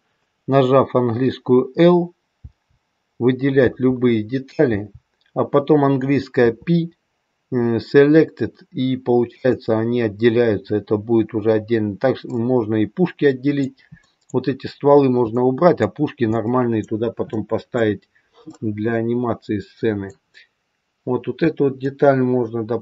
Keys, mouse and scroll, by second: 2.3 l, 3.6 l, 6.3 l, 6.3 p, 12.3 middle click, 13.9 middle click, 15.2 middle click, 16.2 middle click, 17.2 middle click, 18.4 middle click.